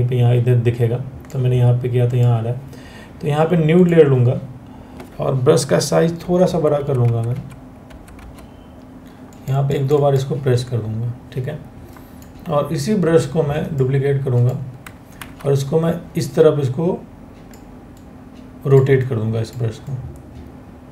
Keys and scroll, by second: 5.8-7.8 typing, 14.8 ctrl+t.